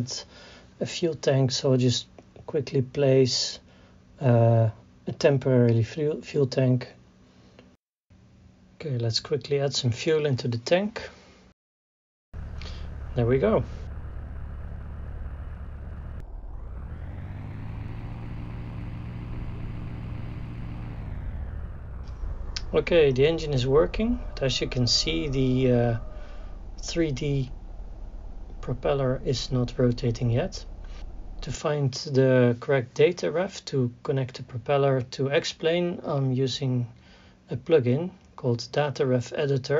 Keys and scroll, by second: 7.3 t, 7.5 e, 7.8 m, 8.0 p, 37.8-38.8 typing.